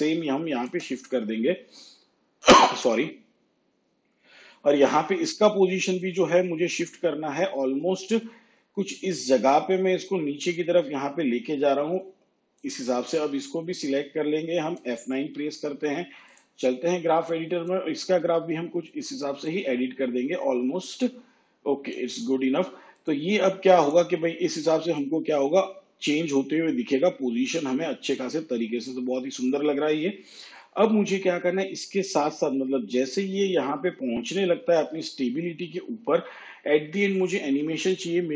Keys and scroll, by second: 15.2 F9.